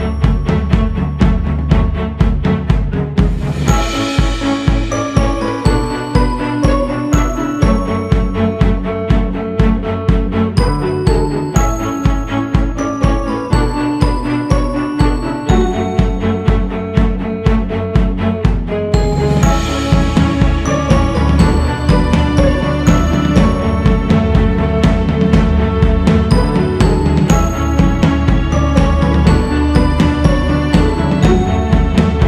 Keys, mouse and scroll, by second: 1.9-5.0 drag, 5.2 shift+c, 5.6 f, 8.9-10.3 scroll down 2, 12.3 shift+h, 14.0 ctrl+z, 30.8 click, 32.1 click.